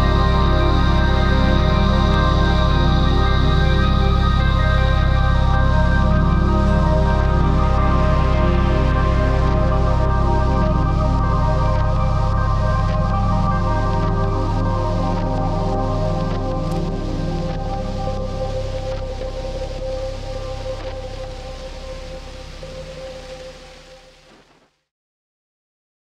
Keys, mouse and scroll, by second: 7.9 ctrl+z.